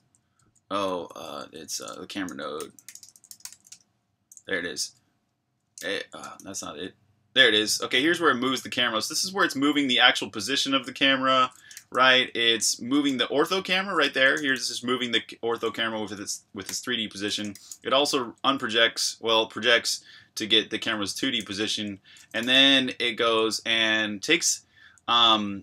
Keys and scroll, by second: 0.0-1.1 typing, 3.7 typing, 4.7 Escape, 4.9-18.2 typing, 21.2 Escape, 21.4 j, 22.4 shift+v, 23.2 j, 24.8 j.